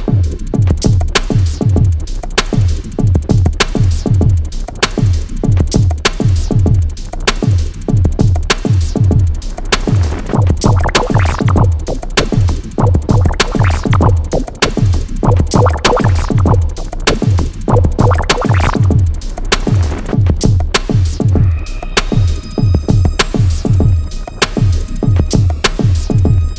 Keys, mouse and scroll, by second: 0.3 click, 3.2 click, 3.8 7, 4.6-7.7 drag, 7.7-9.3 drag, 9.3-12.2 drag, 12.4 click, 15.3-18.4 drag, 18.4 click, 20.3 Down, 21.4 Down, 23.3 click, 23.8 scroll down 1, 24.0-24.9 typing, 25.6 alt+scroll up 1, 25.8 scroll down 1, 25.9 alt+scroll.